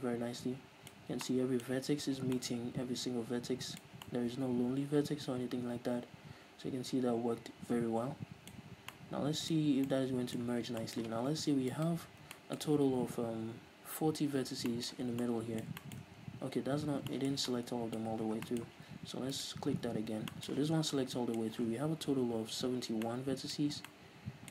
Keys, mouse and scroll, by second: 1.0-1.3 scroll up 1, 8.8 scroll down 2, 9.6 scroll up 2, 11.8 alt+right click, 12.3-19.4 middle drag, 14.5 scroll down 2, 16.4-17.2 scroll up 2, 18.1-18.5 scroll up 2, 18.8 z, 19.4 alt+right click, 19.9-20.4 scroll down 1, 20.4 middle click, 20.6 z, 20.8 scroll down 1, 21.0-23.6 middle drag, 23.6-24.0 scroll up 1, 24.0-24.5 middle drag.